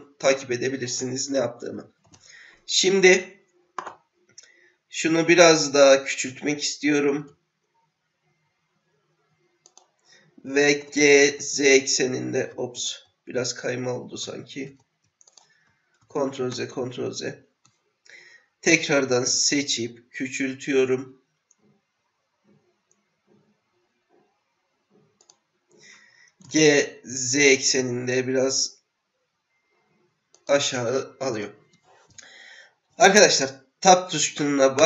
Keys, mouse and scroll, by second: 7.1 s, 10.8 g, 16.0 ctrl+z, 16.5 ctrl+z, 19.2 s, 26.4 g, 31.3 click.